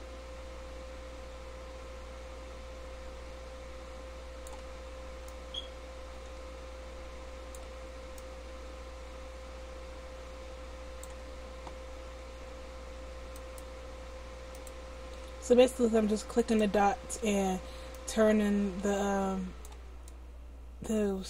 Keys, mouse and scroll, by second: 10.0-11.2 middle drag, 13.3-19.6 right drag, 17.9-19.6 drag, 19.6 middle click, 20.0-21.2 drag.